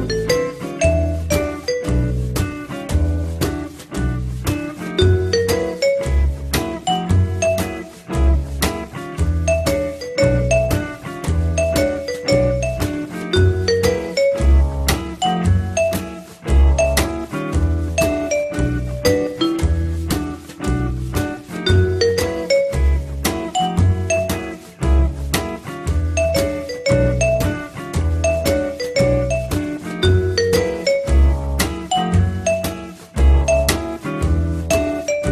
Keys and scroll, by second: 18.7 f, 19.2 F3, 20.9 4, 22.9 l, 26.6 Delete, 31.3 Delete.